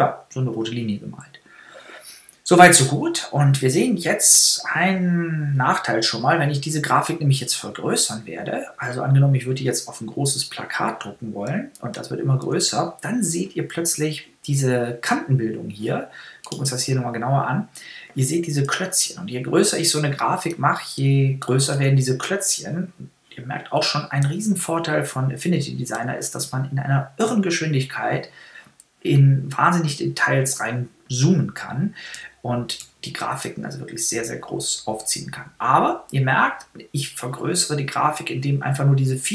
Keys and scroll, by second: 20.3 super++, 24.0 super++, 25.9 super++, 31.9 super++.